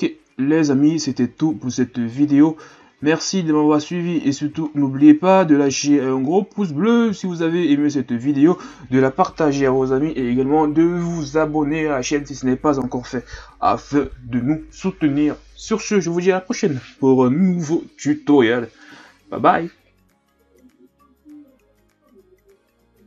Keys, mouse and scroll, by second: 0.0-0.8 scroll down 3, 0.8-2.8 scroll up 1, 2.8 ctrl+s, 4.0-4.7 scroll up 2, 4.7-5.9 scroll down 4, 5.9-7.3 scroll down 4, 7.3-10.2 shift+scroll up 6.